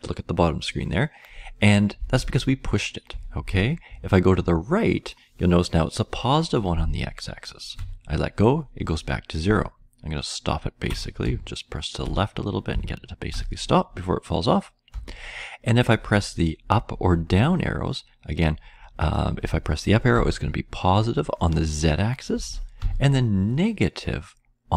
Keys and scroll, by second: 4.3-7.7 Right, 9.4-10.8 Left, 11.2-12.0 Left, 12.6 Left, 13.1 Left, 13.2 Left, 14.9 Right, 20.6-22.2 Up, 23.2 Up, 23.2-24.7 Down.